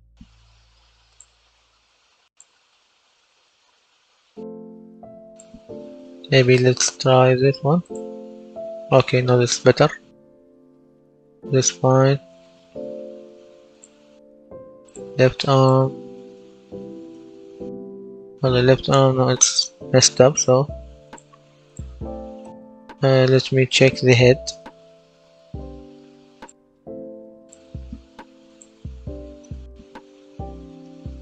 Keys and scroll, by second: 8.7-11.3 typing, 16.7-20.1 typing, 22.1-23.3 typing, 29.1-31.2 typing.